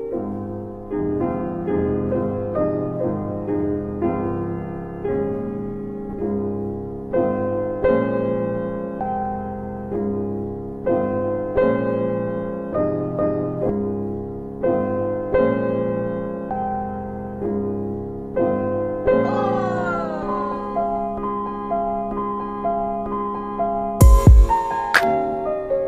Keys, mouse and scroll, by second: 4.9 click, 7.0-8.2 typing, 10.6 click, 11.1-12.5 typing, 13.5 ctrl+z, 14.2 ctrl+z, 14.7 ctrl+z, 16.5 click, 18.3 click, 18.9-20.0 typing, 20.1 Tab, 21.9-23.4 typing, 25.5 alt+middle click.